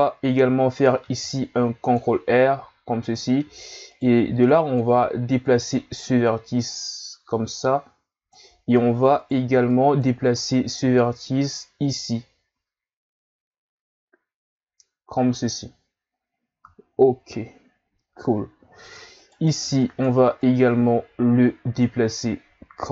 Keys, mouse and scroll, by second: 1.0 ctrl+r, 3.9 right click, 4.2 b, 5.4 click, 9.2 right click, 9.5 b, 10.8 g, 16.8-17.8 scroll down 1, 17.8-19.2 scroll down 1, 19.2 right click, 19.6 b, 20.4 click.